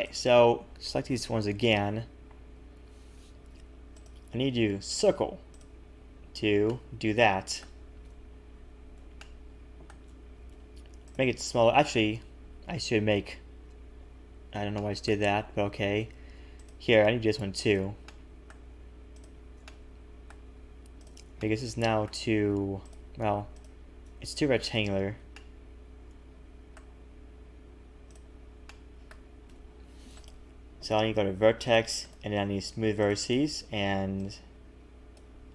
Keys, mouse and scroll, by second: 0.0 click, 1.1 ctrl+KP_Add, 3.9 click, 5.5 click, 6.7 middle click, 8.0 KP_1, 9.2 shift+middle click, 10.5 g, 13.0 Left, 14.7 middle click, 15.5 a, 15.9-16.3 scroll up 2, 15.9 a, 16.5 alt+shift+click, 17.7 click, 18.1 middle click, 19.1 alt+shift+click, 19.6 middle click, 21.0 alt+shift+click, 21.4 middle click, 22.8 alt+shift+click, 24.3 ctrl+z, 24.6 alt+shift+click, 25.3 middle click, 28.1 click, 28.7 middle click, 29.5 KP_1, 30.2 right click, 31.7 click, 32.0 right click, 34.2 click.